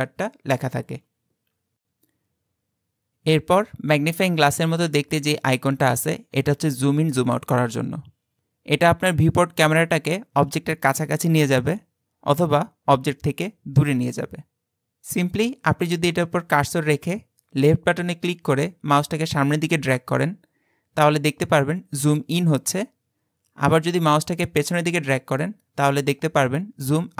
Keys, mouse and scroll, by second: 9.3-12.4 drag, 17.7-20.7 drag.